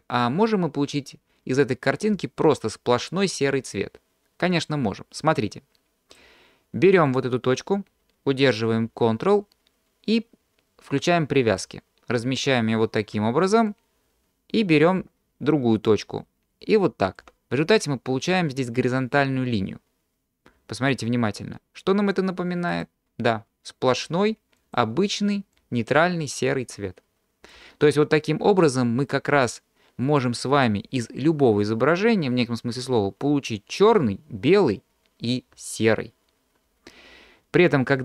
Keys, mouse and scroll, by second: 5.2-6.4 drag, 7.1-11.7 drag, 13.7-17.4 drag, 22.8 click, 24.9 click, 25.6-28.7 drag.